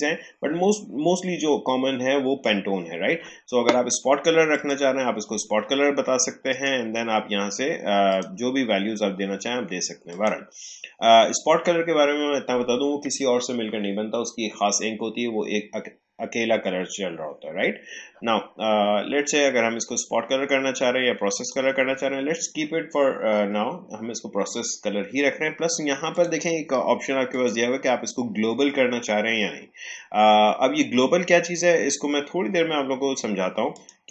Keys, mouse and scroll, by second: 4.5 click, 21.3 click, 26.1 click, 33.7 click.